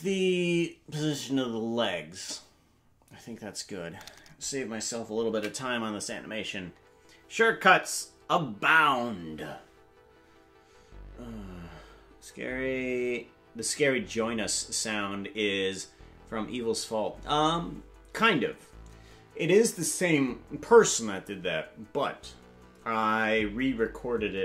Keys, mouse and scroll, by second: 7.5 ctrl+s.